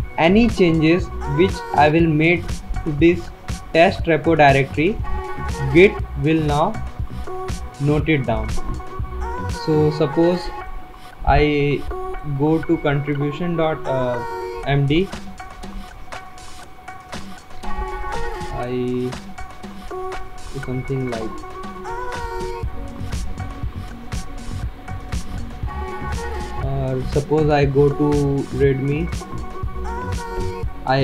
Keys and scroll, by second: 15.7 Return, 30.5 Return.